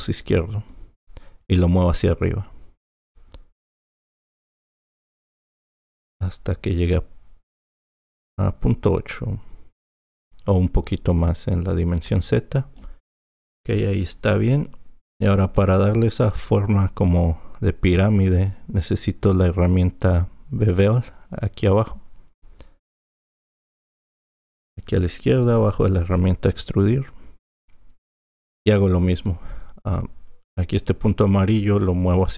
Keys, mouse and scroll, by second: 0.7-2.9 drag, 23.5-24.9 drag, 25.0-26.5 drag.